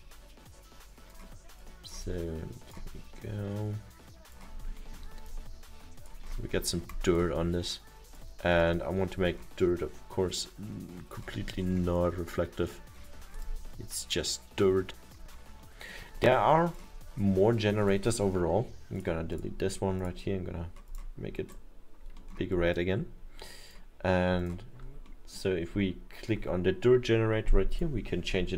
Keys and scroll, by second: 18.5 Delete.